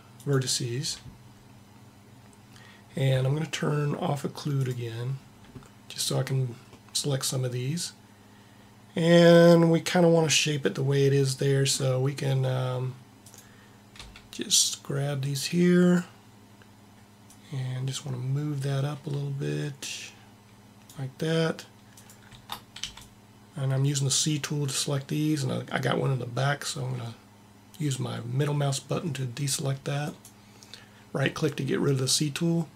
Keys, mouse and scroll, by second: 4.5-6.4 drag, 6.7 click, 13.4 click, 13.9 b, 15.2 b, 17.3 click, 21.9-22.9 drag, 22.7 c.